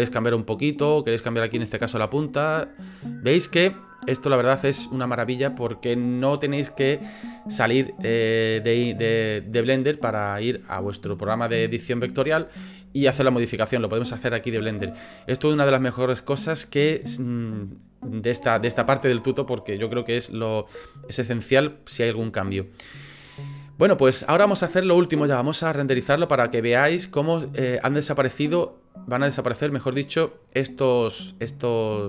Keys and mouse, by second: 0.2 middle click, 1.0 click, 1.2 click, 2.0 middle click, 3.2 click, 3.9 click, 4.3 click, 19.4-19.9 drag, 21.0 click, 26.4-27.4 drag.